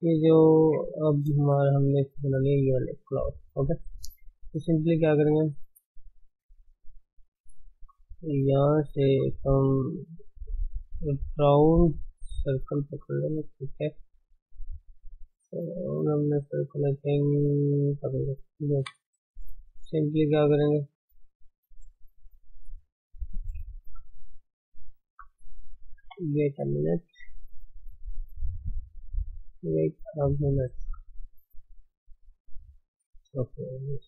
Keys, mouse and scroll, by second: 0.6 KP_1, 0.9-1.3 middle drag, 0.9-1.3 scroll up 2, 1.8-5.3 shift+middle drag, 5.3 click, 5.5 Tab, 5.7 scroll up 3, 6.1 shift+middle click, 7.4 click, 8.5 alt+shift+click, 9.1 shift+z, 9.5-11.4 middle drag, 10.6-11.4 scroll up 2, 11.4 shift+z, 12.6 alt+shift+Left, 12.9-15.5 middle drag, 15.5 shift+z, 15.8-18.4 middle drag, 18.6 middle click, 18.8 KP_1, 19.3-19.8 scroll down 4, 19.8 shift+z, 21.0 shift+z, 21.6-22.0 scroll up 3, 22.4 shift+z, 22.9-23.3 scroll down 2, 23.8 shift+z, 25.1 shift+z, 25.9 KP_3, 26.5-27.0 scroll up 2, 27.0 shift+z, 27.4 shift+middle click, 28.1 shift+z, 31.2-31.6 scroll down 2, 32.7 middle click.